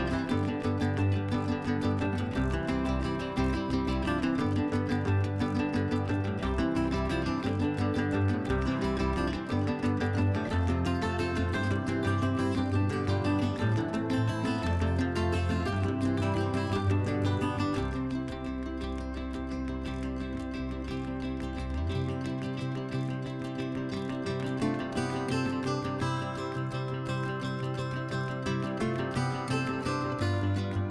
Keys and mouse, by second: 0.3 ctrl+z, 0.5 ctrl+z, 1.2 click, 3.1 click, 3.6 ctrl+z, 3.9 ctrl+z, 4.4 KP_Divide, 5.2 click, 6.1 middle click, 6.7 ctrl+z, 7.0 click, 7.7-8.8 middle drag, 9.0 click, 9.7 ctrl+z, 10.4 click, 13.7 click, 14.9 click, 16.2 click, 17.6 click, 19.3 click, 19.7 ctrl+z, 19.9 ctrl+z, 20.5 click, 21.6 click, 22.5 click, 23.4 ctrl+z, 23.5 ctrl+z, 23.7 middle click, 24.8 click, 25.7 ctrl+z, 26.3 ctrl+z, 26.4 ctrl+z, 26.5 ctrl+z, 26.8 ctrl+z, 27.1-27.6 ctrl+z, 27.8 ctrl+z, 28.6 F4, 29.0 F4, 29.4 middle click, 30.4 click.